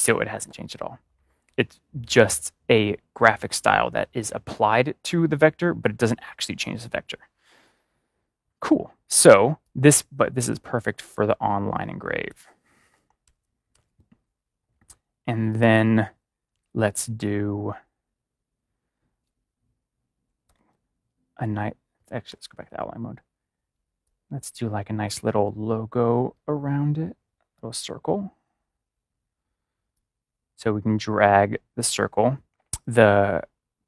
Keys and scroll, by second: 13.2 ctrl+0, 20.4 ctrl+y, 22.3 ctrl+y.